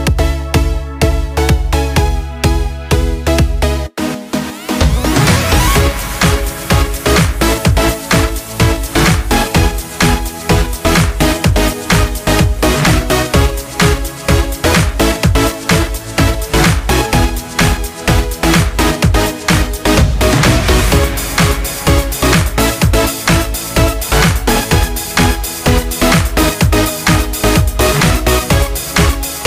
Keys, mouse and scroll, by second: 0.6 Tab, 2.5 click, 8.1-15.2 drag, 21.1 click, 26.4 click.